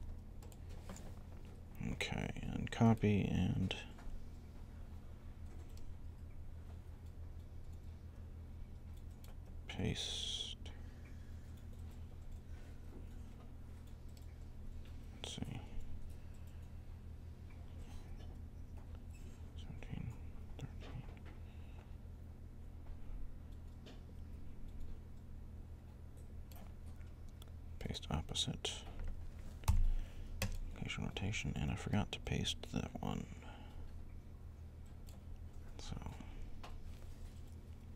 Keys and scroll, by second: 29.5 shift+1.